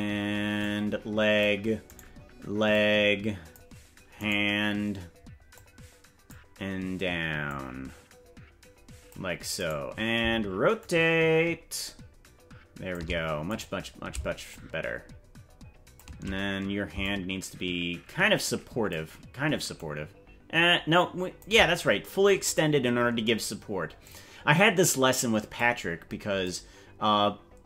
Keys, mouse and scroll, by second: 0.6 click, 2.0 right click, 2.7 click, 4.2 right click, 5.5 click, 7.4-9.1 drag, 9.7 right click, 10.7-12.9 shift+drag, 13.5 right click, 14.4-16.0 shift+drag, 17.0-18.9 shift+drag, 19.7-21.4 shift+drag, 22.5 right click, 24.0-25.6 drag, 26.4-27.6 drag.